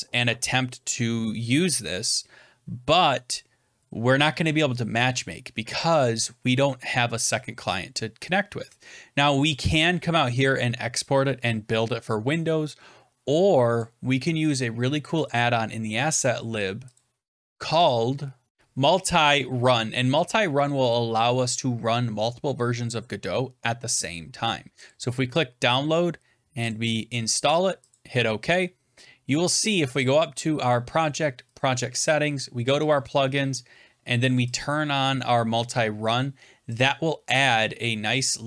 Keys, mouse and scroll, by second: 5.7 click, 9.5 click, 13.7 click, 15.2 click, 16.9 click, 18.5 BackSpace, 21.5 click, 23.3 typing, 24.2 click, 24.8 click, 26.6 click, 27.8 click, 30.6 click, 31.5 click, 32.8 click, 34.5 click, 36.7 click.